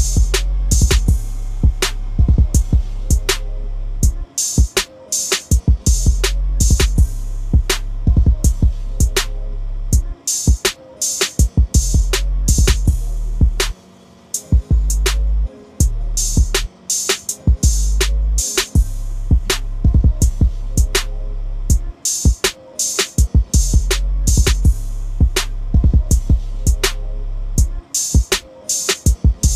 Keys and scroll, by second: 17.2 ctrl+d.